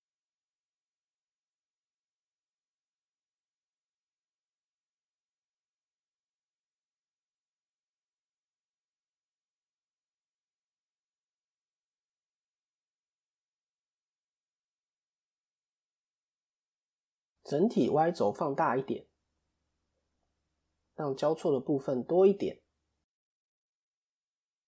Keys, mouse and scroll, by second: 0.0 click, 3.5 shift+middle click, 3.9-4.3 scroll up 3, 4.3 shift+middle click, 5.1-5.9 scroll up 1, 6.1 click, 10.4 middle click, 12.1 KP_1, 12.9-13.5 scroll down 1, 13.8 click, 14.3 shift+middle click, 15.7 s, 16.3 a, 17.1 KP_7, 18.0 s, 22.9 KP_1, 24.3 click.